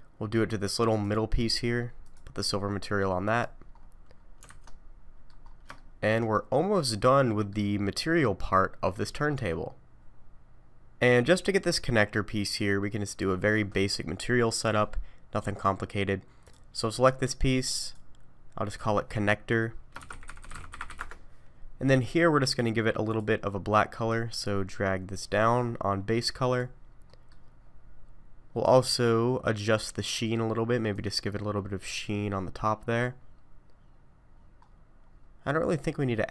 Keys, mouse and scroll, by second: 1.0 click, 2.0 click, 3.7-4.4 scroll down 7, 4.5 alt+a, 4.6 middle click, 5.5 scroll up 4, 5.7 shift+middle click, 6.3 middle click, 7.8-8.6 scroll down 1, 8.6 scroll down 3, 16.5 click, 17.8 click, 18.7 click, 20.4 n, 22.0-22.6 scroll down 3, 23.1 click, 27.1 middle click, 27.6-28.7 scroll down 7, 30.9 click, 33.7-34.5 scroll down 8, 34.6-35.3 scroll up 9, 35.9-36.3 scroll up 2.